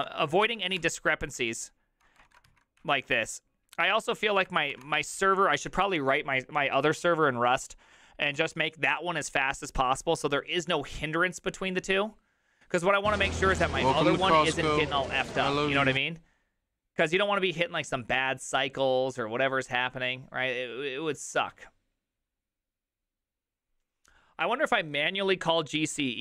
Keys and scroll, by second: 0.0 ctrl+a, 0.1 ctrl+a, 0.4 ctrl+c, 0.6 ctrl+c, 0.8 Up, 1.3 Up, 2.0 Return, 2.3 ctrl+a, 2.5 ctrl+a, 2.8 Up, 4.5 space, 4.7 space, 4.8 Return, 4.8 3.